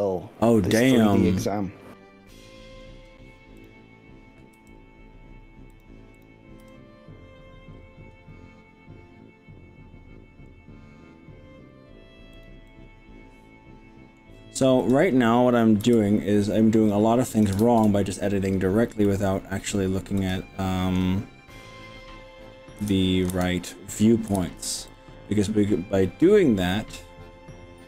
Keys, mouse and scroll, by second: 0.4-2.8 middle drag, 3.6 click, 4.6 g, 6.2 click, 6.6 g, 8.4-9.0 scroll up 3, 9.4-10.0 scroll up 2, 10.6-11.0 scroll up 2, 11.6 scroll up 1, 12.4 click, 12.6 scroll up 1, 12.7-14.2 middle drag, 14.8 click, 15.8 g, 17.4 click, 17.6 ctrl+z, 19.1 middle click, 20.2 click, 22.8 KP_2, 23.4 KP_3, 24.3 KP_1, 24.8 g.